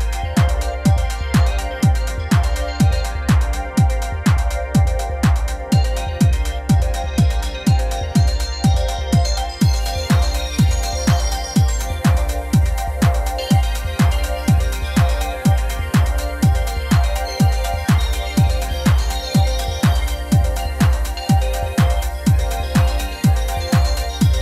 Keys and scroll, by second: 5.9 typing.